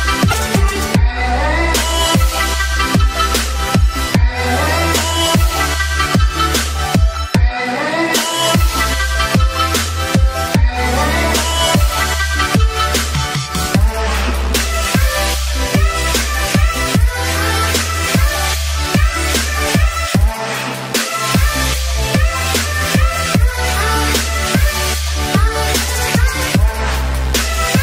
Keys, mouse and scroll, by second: 5.4 click, 7.7-9.2 scroll down 1, 9.5-16.8 drag, 16.9-19.9 drag, 27.2-27.8 drag.